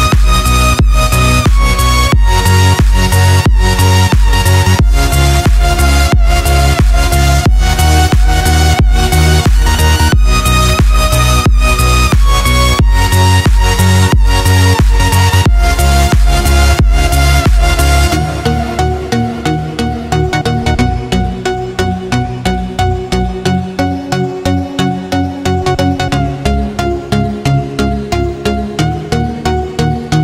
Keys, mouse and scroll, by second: 0.8 click, 1.6-3.4 scroll down 1, 3.4 click, 4.6 Delete, 6.7 click, 10.8 click, 11.1 ctrl+l, 11.5 ctrl+s, 12.9 click, 19.4 click.